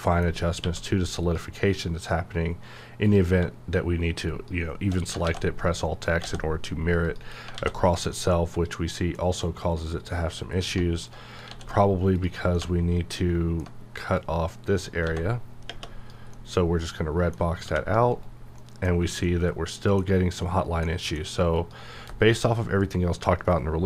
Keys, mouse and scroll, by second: 0.6 q, 1.2 click, 5.2 alt+x, 6.2 x, 7.1 click, 7.5 alt+a, 8.1-9.8 middle drag, 9.8 click, 10.6 middle click, 11.5 d, 12.1 click, 12.5-14.2 middle drag, 14.2 click, 15.0 x, 16.3-17.7 middle drag, 17.7 g, 18.1 right click, 18.6 middle click, 19.0 scroll down 1, 19.2-20.8 middle drag, 21.6 click.